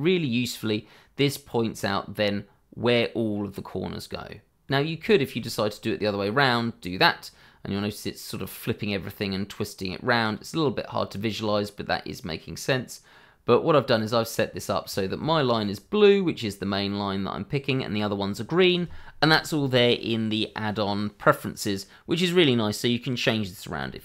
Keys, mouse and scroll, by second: 0.5 middle click, 4.7 scroll down 1, 5.0 shift+middle click, 7.3 middle click, 14.8 middle click, 15.2 shift+middle click, 15.6-17.6 scroll up 1.